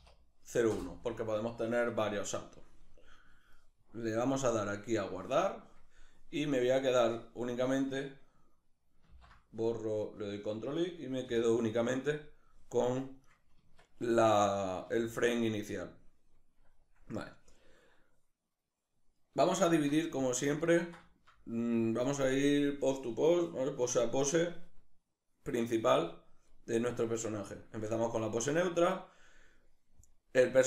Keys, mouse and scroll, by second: 6.3-8.7 right drag, 8.7 ctrl+i, 12.9-13.2 right drag, 13.2 Tab, 13.7-14.5 right drag, 14.5 a, 15.4-24.7 middle drag, 19.3 alt+q.